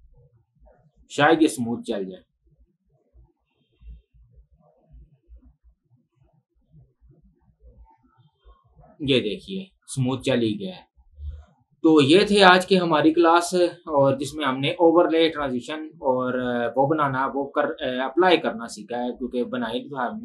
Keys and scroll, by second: 10.8 space.